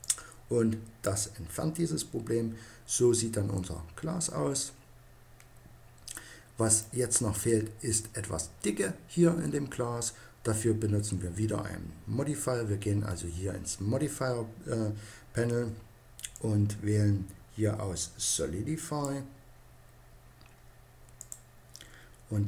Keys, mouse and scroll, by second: 1.5 middle click, 7.7-9.2 middle drag, 16.1-17.8 drag, 20.9-22.4 drag.